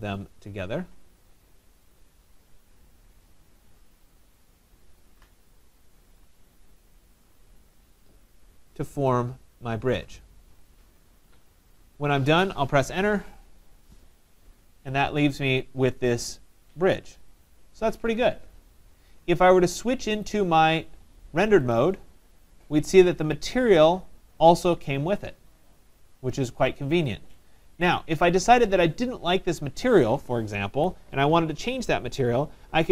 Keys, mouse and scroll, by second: 1.5 click, 3.8 click, 5.1 click, 6.7 click, 7.9 click, 8.3-9.1 scroll, 10.6 right click, 10.8 middle click, 11.0-11.7 middle click, 11.5 middle click, 11.5 middle click, 11.6 middle click, 12.9 Return, 13.8 middle click, 14.0 middle click, 14.9 middle click, 14.9 middle click, 17.3 scroll, 17.5 right click, 20.3 click, 22.4 middle click, 22.5-22.8 scroll, 22.8 middle click, 27.4 right click, 30.7 Escape.